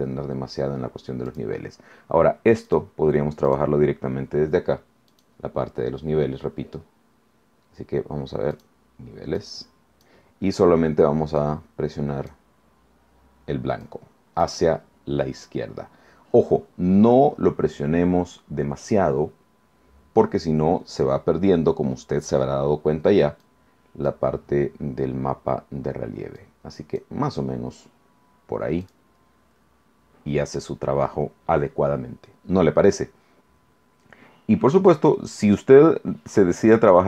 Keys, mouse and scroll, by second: 1.3 click, 2.7 click, 3.5 click, 5.1 click, 8.5 click, 9.4-10.2 drag, 11.4-12.5 drag, 13.8-14.6 drag, 23.4-24.3 drag, 26.4 click, 28.8 click, 34.8 click, 35.4 click.